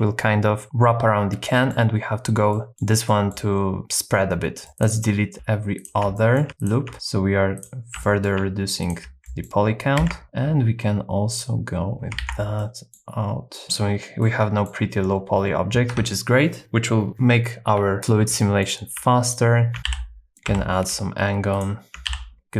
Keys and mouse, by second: 0.6 middle click, 1.5 middle click, 2.5 middle click, 3.1 middle click, 4.7 Tab, 4.7 2, 6.1 middle click, 6.6 alt+shift+click, 8.0 middle click, 8.8 alt+shift+click, 9.2-10.2 middle drag, 10.0 super+x, 12.2 super+x, 12.6 middle click, 13.5 middle click, 14.2 middle click, 15.9 Tab, 18.0 Tab, 18.0 2, 18.4 middle click, 19.2 alt+shift+click, 19.8 super+z, 19.9 f, 20.4 2, 22.1 f.